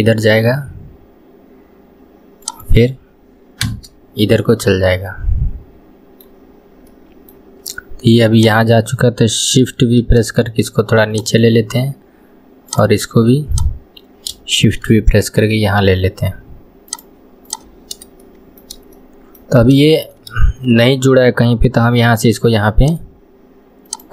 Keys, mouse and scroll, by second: 4.3-6.4 middle drag, 6.4 scroll up 1, 6.9-8.4 middle drag, 8.4 click, 10.0 shift+v, 12.7 click, 14.6 shift+v, 17.5 click, 18.2-19.6 shift+middle drag, 19.6-19.9 scroll up 2, 19.9-21.9 shift+middle drag, 21.9 k.